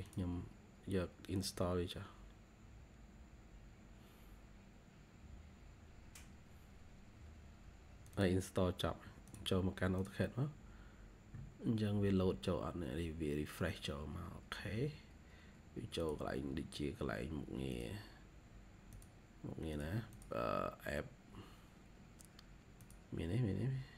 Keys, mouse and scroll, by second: 20.0 double click.